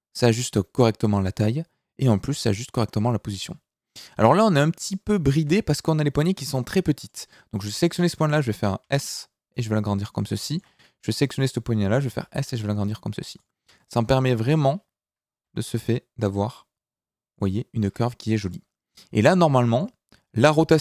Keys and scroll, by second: 5.3 Escape, 8.8 s, 12.0 s, 15.4 r, 20.3 r.